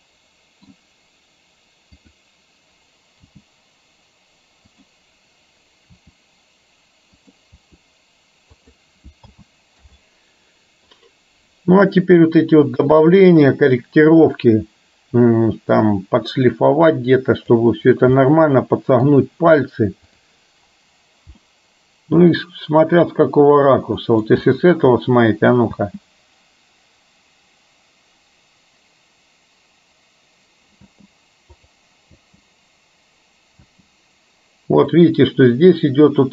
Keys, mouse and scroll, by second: 2.0 click, 3.4 g, 5.9 r, 7.6 r, 9.4 a, 9.9 i, 11.1-17.7 drag, 18.2 middle click, 21.5-24.2 middle drag, 25.7 space, 30.9 space, 31.7 click, 33.0 space, 33.8 space, 35.0-36.3 drag.